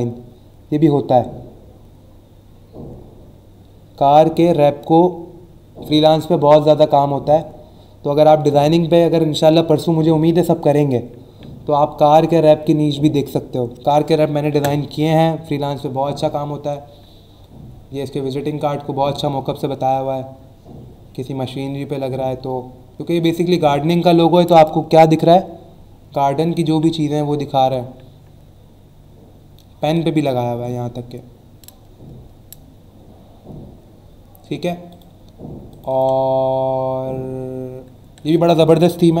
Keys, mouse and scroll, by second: 15.3-16.0 scroll down 2, 16.4 scroll down 1, 17.3 scroll down 1, 17.9 scroll up 1, 19.1 scroll down 1, 19.9-20.3 scroll down 2, 21.4-22.9 scroll down 4, 25.6 scroll down 1, 26.5 scroll down 1, 27.1-28.2 scroll down 3, 28.5 scroll down 1, 29.1 scroll down 1, 30.4 scroll down 1, 31.2-33.3 scroll down 5, 33.8-34.4 scroll down 2, 34.9 click, 35.7 click.